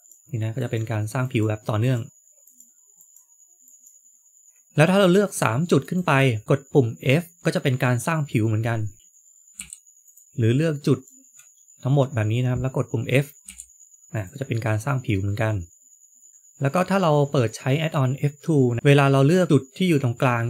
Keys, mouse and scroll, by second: 1.1 ctrl+right click, 1.7 ctrl+right click, 2.9 ctrl+right click, 3.6 ctrl+right click, 5.7 shift+click, 8.9 shift+click, 9.9 shift+click, 10.2 ctrl+right click, 13.3 f, 14.1 click, 14.4 middle click, 16.3 shift+middle click, 18.8 click.